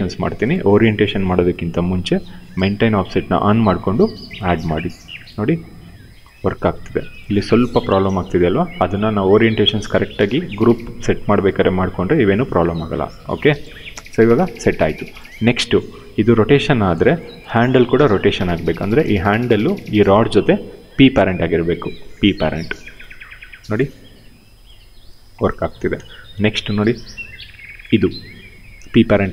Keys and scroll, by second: 5.1 e, 8.5 ctrl+z, 10.0 ctrl+z, 12.8 ctrl+z, 14.0 w, 16.0 e, 17.1 ctrl+z, 17.4 q, 22.1 p, 23.5 e, 25.3 ctrl+z, 25.6 q, 26.8 w, 27.8 e.